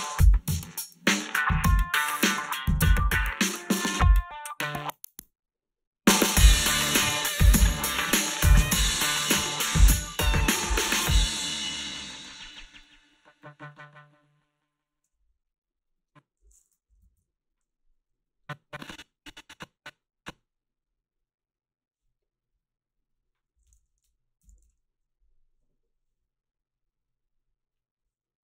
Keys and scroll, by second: 15.0 space, 16.9 =, 17.0 =, 23.6-25.2 typing.